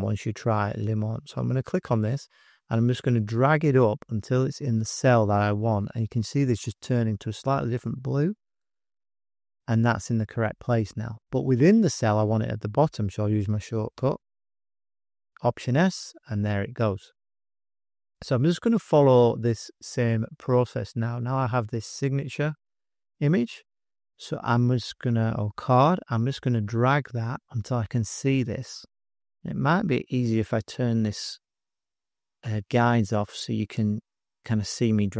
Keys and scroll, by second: 13.9 alt+s, 30.5 shift+g.